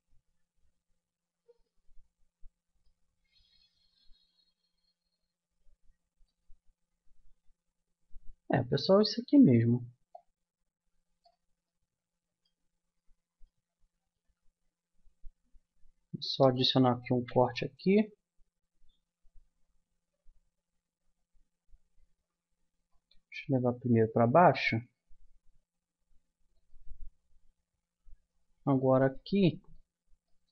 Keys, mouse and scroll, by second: 0.7-2.4 middle drag, 3.0 middle click, 3.1-4.8 middle drag, 6.7-10.1 middle drag, 10.1-11.8 drag, 12.0 middle click, 12.8-16.2 middle drag, 16.2 a, 17.0 ctrl+r, 29.0 click.